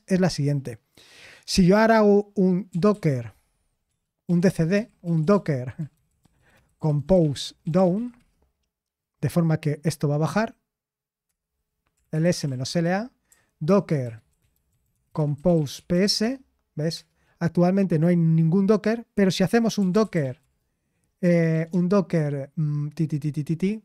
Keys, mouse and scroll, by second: 6.1-8.4 typing, 12.0-16.9 typing, 20.2-21.7 typing.